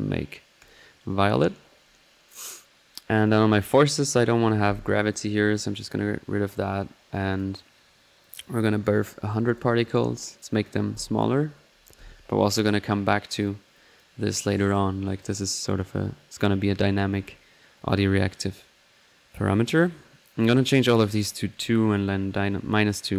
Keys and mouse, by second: 3.7 middle click, 3.9-4.4 middle drag, 4.5-6.8 drag, 7.3-12.7 drag, 13.0-13.7 middle drag, 13.7-15.3 drag, 15.3-23.1 drag.